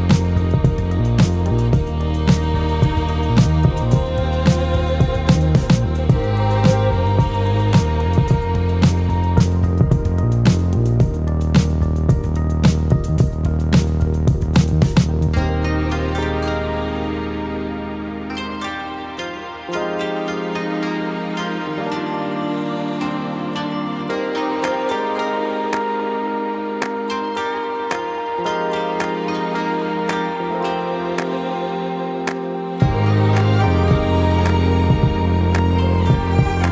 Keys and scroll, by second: 9.2 typing, 14.7 ctrl+space, 15.3-20.5 ctrl+space, 24.2 [, 24.6 [, 24.7 [.